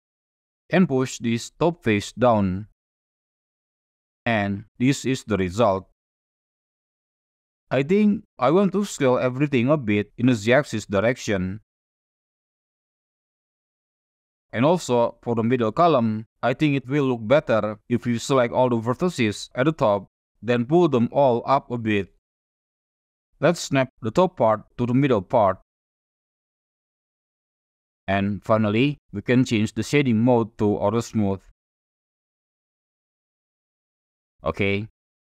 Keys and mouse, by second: 0.6 middle click, 1.4-3.1 drag, 3.5-5.1 drag, 5.1 middle click, 6.7 middle click, 8.3 a, 9.4 s, 9.9 z, 12.4 Tab, 13.7-14.1 drag, 15.4 click, 16.3 KP_1, 16.7 shift+z, 17.0 1, 18.0 alt+a, 18.3-19.6 drag, 21.1 click, 21.3 click, 23.0 Tab, 23.6 click, 25.1-26.7 drag, 27.0 click, 28.5 shift+z, 28.9-29.4 middle drag, 29.8 click, 30.2 right click, 31.9 click, 32.7-33.0 shift+middle drag, 33.2-35.3 middle drag.